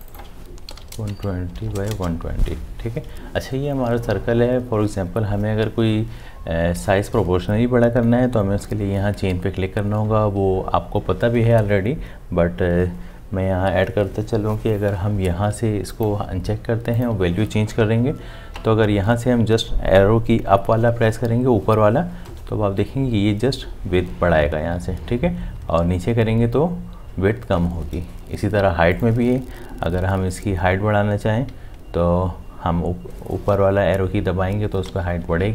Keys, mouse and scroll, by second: 0.5-1.5 typing, 22.3 Up, 25.5 Down, 28.9 Down, 31.5 Up.